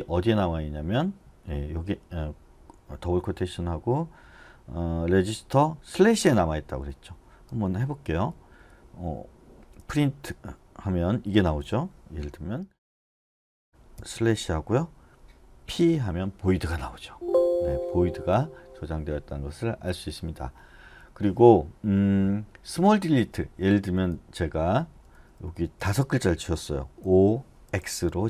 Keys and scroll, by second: 7.1-10.3 typing, 11.6 u, 12.7 shift+', 17.1 Escape, 18.1 d, 18.3 d, 22.9-24.9 typing, 27.0-28.2 typing.